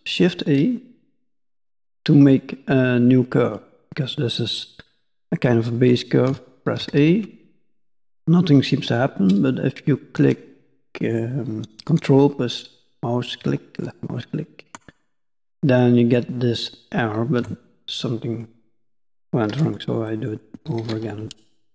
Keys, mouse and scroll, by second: 5.4 shift+middle click, 17.4 Tab, 19.5 x, 20.1 middle click, 20.8 shift+a.